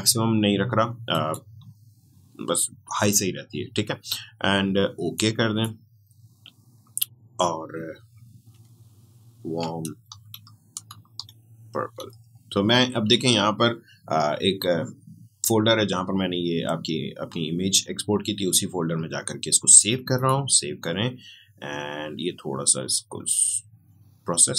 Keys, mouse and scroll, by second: 1.1 click, 5.1-8.1 drag, 8.5 shift+click, 9.4 shift+w, 9.8 a, 11.1 u, 14.3 typing, 20.1 click.